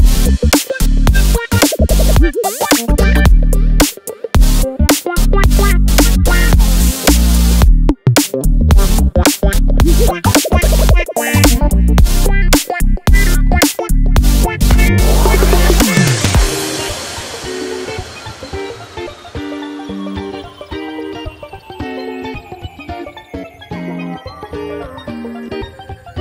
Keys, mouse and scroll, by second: 0.0 click, 1.2 click, 2.2 click, 3.7 click, 4.2 click, 6.7 click, 8.2 scroll down 2, 12.0 click, 13.9 click, 16.6 click, 16.9 click, 17.3 click, 18.9 click, 23.1 click.